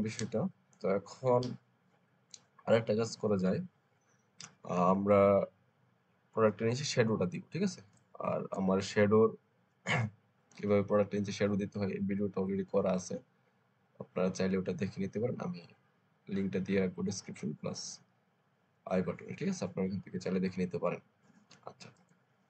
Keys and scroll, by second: 7.8 alt+space.